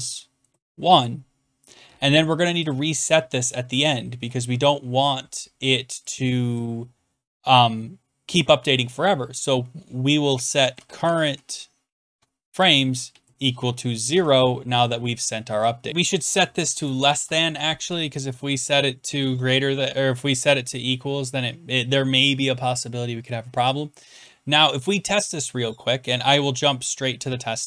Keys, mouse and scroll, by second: 0.3-1.0 typing, 2.7 click, 3.4 BackSpace, 3.6 Return, 4.1 Return, 6.6 Up, 6.6 click, 10.3-14.6 typing, 15.6-17.2 typing, 15.9 click, 16.1 click, 16.8 Left, 26.4 click.